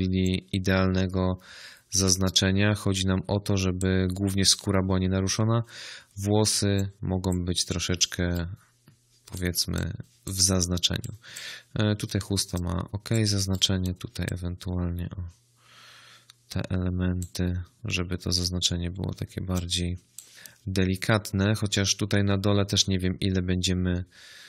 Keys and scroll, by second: 9.5 space, 12.2 space.